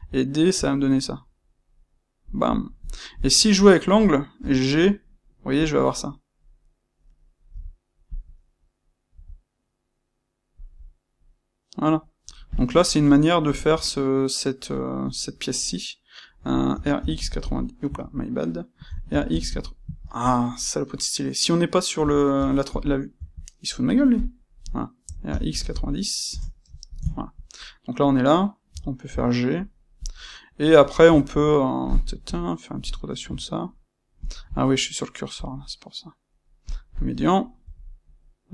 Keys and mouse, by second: 2.6 middle click, 9.9-12.2 middle drag, 12.4 click, 12.7-24.0 ctrl+middle drag, 16.6 f, 18.8 f, 22.2 >, 23.2 Escape, 24.0 click, 25.0 f, 26.2 KP_Enter, 26.9-28.6 ctrl+shift+middle drag, 28.6 c, 30.0 click, 30.1-32.2 middle drag, 32.2 KP_3, 33.2 f, 34.2 click, 35.3-38.5 drag, 37.6 c.